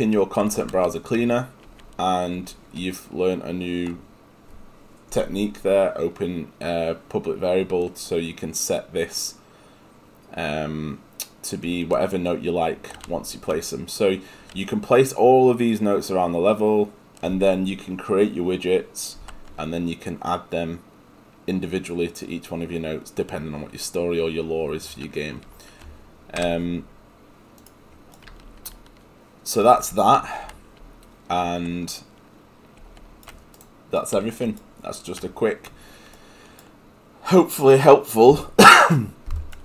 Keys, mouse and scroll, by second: 26.7 Escape.